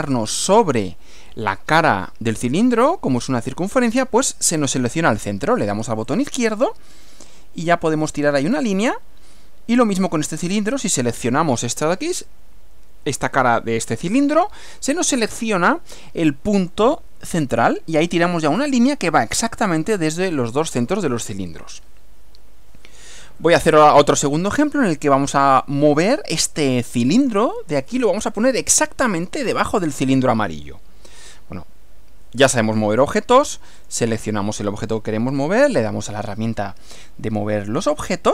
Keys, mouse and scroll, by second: 6.1 click, 16.6 click, 33.8 click.